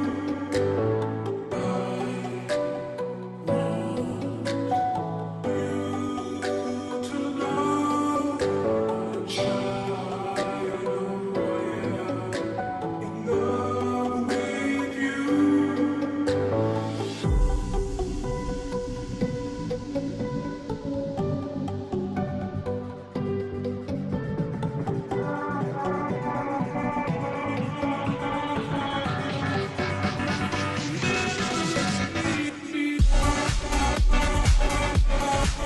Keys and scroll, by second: 5.6 Return, 6.9 ctrl+j, 7.9 ctrl+t, 15.3 ctrl+t, 29.1 Return, 34.8 ctrl+t.